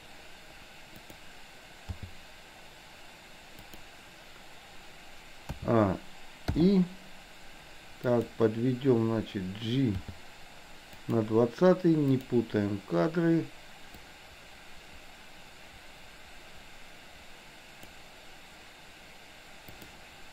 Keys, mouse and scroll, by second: 1.1 click, 1.8 g, 5.6 a, 8.1 click, 10.0 g, 12.3 click, 14.2-18.0 drag, 19.8 click.